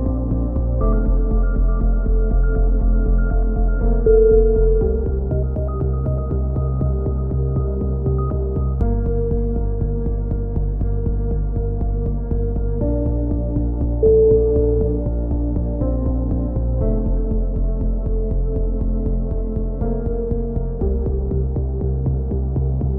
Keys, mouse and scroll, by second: 3.4 middle click, 4.0-6.2 drag, 6.0 ctrl+KP_7, 6.7 g, 8.7 middle click, 9.9 g, 10.8 a, 10.9 z, 11.4 Tab, 13.8 KP_1, 14.0 middle click, 14.5 z, 16.1 z, 16.3 z, 17.0 click, 20.6 KP_3, 21.1 z, 21.6 middle click, 22.2 z, 22.7 Tab.